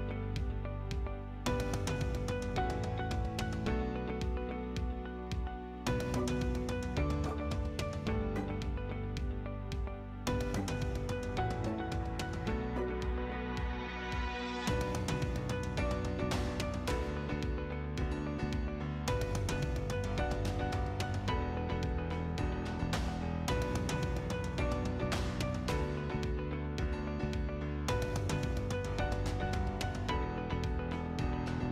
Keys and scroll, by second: 0.5 c, 1.3 space, 4.5 F8, 28.8 m, 28.9 space.